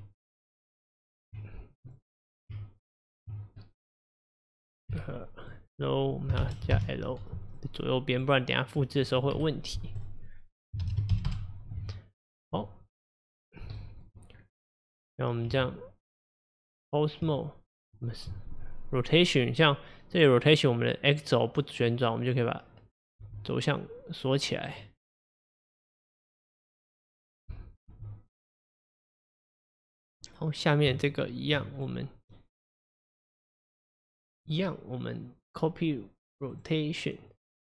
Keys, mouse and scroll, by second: 1.9 click, 2.3 click, 2.6 Tab, 3.7-5.0 middle drag, 5.0 F2, 8.2 click, 9.4 F2, 11.8 Tab, 13.4-13.8 scroll up 4, 13.8-14.4 middle drag, 14.4-14.8 scroll down 1, 14.8-15.6 middle drag, 15.6 Tab, 23.3 r, 25.0-26.4 middle drag, 26.4-28.0 drag, 28.0 r, 30.0 click, 30.9 Tab, 31.8 click, 32.2 click, 33.2 click, 33.9 click, 36.6-37.4 drag.